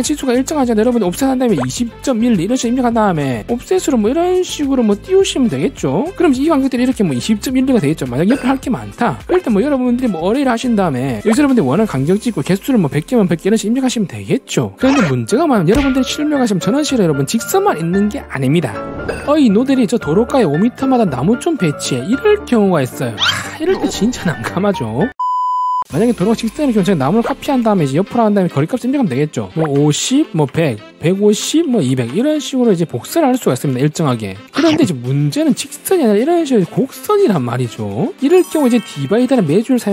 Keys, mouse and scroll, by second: 1.8-3.1 typing, 3.8 click, 4.2 click, 4.9 click, 5.2 click, 5.7 click, 6.0 right click, 6.5 w, 6.6 right click, 7.0 click, 7.7 click, 8.1 click, 8.3 right click, 9.8 a, 10.1 r, 10.4 right click, 12.4 click, 13.2 click, 19.6 click, 27.5 c, 27.6 right click, 27.7 click, 27.9 click, 28.2 right click, 28.3 click, 29.6-31.8 typing, 32.8 right click, 32.9 right click, 35.3 e, 35.4 click, 35.6 click, 36.1 click.